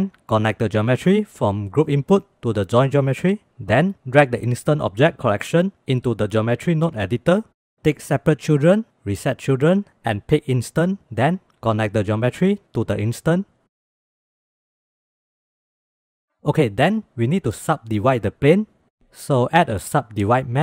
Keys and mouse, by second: 0.2 click, 1.2-2.3 drag, 4.8-6.2 drag, 8.6 click, 10.1 click, 12.3-13.5 drag, 14.3 shift+click, 14.7 shift+click, 15.6 shift+click, 15.7 shift+middle click, 16.1 shift+middle click, 19.5 shift+a.